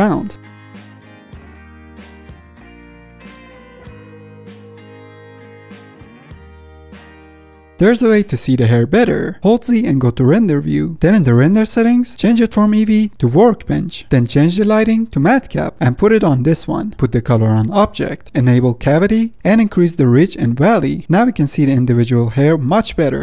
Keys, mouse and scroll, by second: 0.2 ctrl+z, 0.4 middle drag, 0.5 click, 0.8-1.2 middle drag, 1.2-2.1 drag, 2.1 middle click, 2.3 drag, 2.5-2.8 middle drag, 2.8 drag, 3.0 middle click, 3.1 f, 3.3-3.6 drag, 3.6 middle drag, 3.8 drag, 3.9 middle click, 3.9 scroll up 1, 4.0 middle drag, 4.2-7.3 drag, 7.3-8.1 middle drag, 8.1 ctrl+Tab, 8.6 middle click, 8.7-9.3 scroll down 4, 9.3-10.0 middle drag, 10.0 z, 11.3 middle click, 11.9 click, 13.3-18.2 drag, 18.9-20.1 drag, 20.2 click, 21.0 scroll down 3, 21.1-21.8 middle drag, 21.8 scroll up 2, 22.0 middle drag, 22.2 scroll down 1, 22.5-23.2 middle drag.